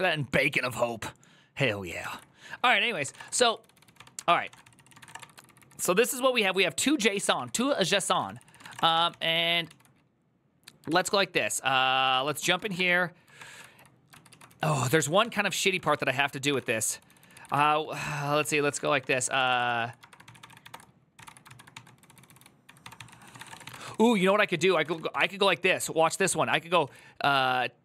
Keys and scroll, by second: 1.8 alt+{, 2.6-9.7 typing, 10.6 ctrl+u, 11.8 ctrl+c, 12.1-27.8 typing, 13.1 ctrl+d, 13.3 ctrl+d, 13.9 ctrl+u.